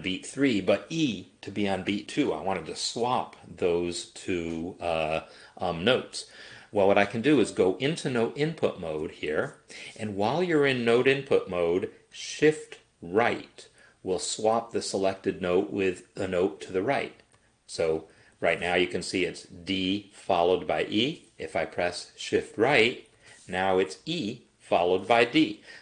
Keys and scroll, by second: 9.0 n, 17.2 shift+Right, 18.2 shift+Left, 22.9 shift+Right.